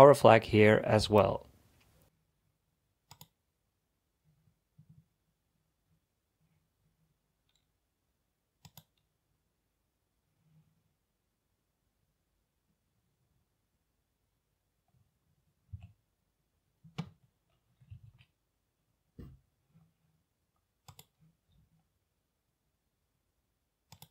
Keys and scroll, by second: 15.7 a, 17.7-18.5 typing, 19.8-20.5 typing.